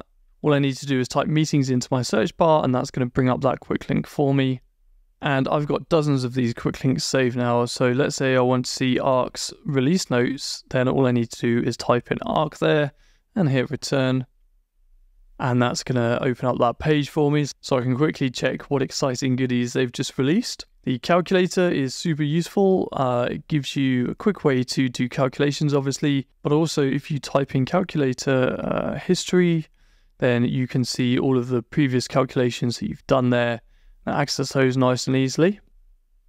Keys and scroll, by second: 10.3 BackSpace, 12.3 Return, 28.5 Down, 29.5 Return, 36.1 Down.